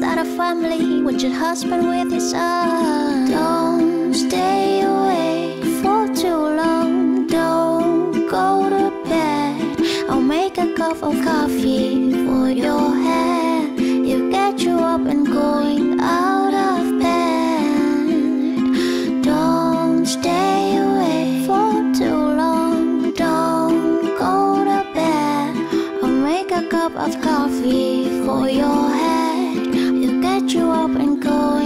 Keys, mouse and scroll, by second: 20.6 p.